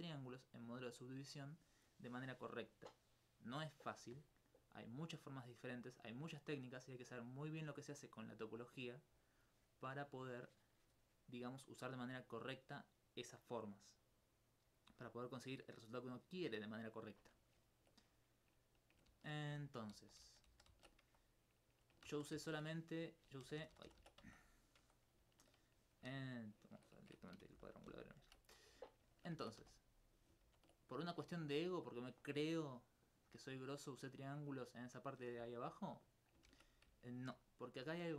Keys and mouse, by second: 19.1 ctrl+z, 19.9 ctrl+z, 20.2 ctrl+z, 20.5 ctrl+z, 20.7 ctrl+z, 22.1 ctrl+z, 22.3 ctrl+z, 23.4-24.0 ctrl+z, 25.4 alt+click, 28.9 alt+click, 29.0 alt+click, 30.0 right click, 30.4 ctrl+x, 31.1 click, 32.5 middle click, 33.5 middle click, 35.5 alt+click, 36.2 right click, 36.5 ctrl+x, 37.0 alt+click.